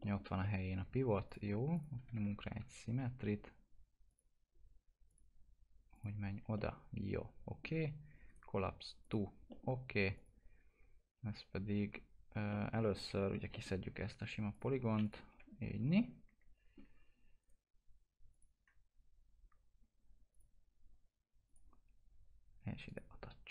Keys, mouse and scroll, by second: 0.0 middle click, 0.2 scroll down 1, 0.4 alt+middle click, 1.3 click, 2.0 s, 4.1 click, 6.6-8.3 alt+middle drag, 8.3 right click, 9.0 click, 9.5 alt+middle click, 10.1 click, 12.5 alt+middle click, 13.1 alt+q, 13.5 middle click, 13.8-14.2 scroll up 1, 14.5 click, 15.3 Delete, 15.6 scroll down 1, 16.0-17.4 alt+middle drag, 17.4 right click, 18.3 click, 18.7 scroll up 1, 20.3 click.